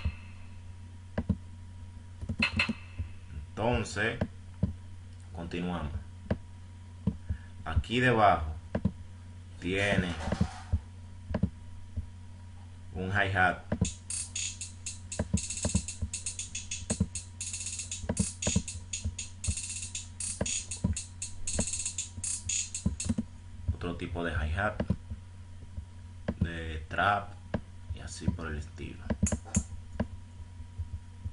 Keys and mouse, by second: 0.5 F1, 1.8 F1, 8.7 click, 10.9 F1, 10.9 click, 12.9 click, 28.6-29.7 drag.